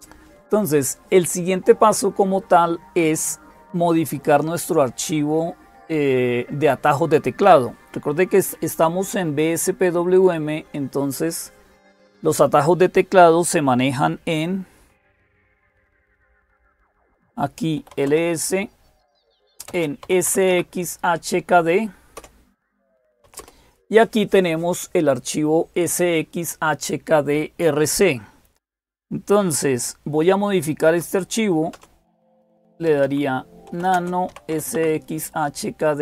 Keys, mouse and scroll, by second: 0.0-36.0 typing, 22.0 Return, 35.6 Tab.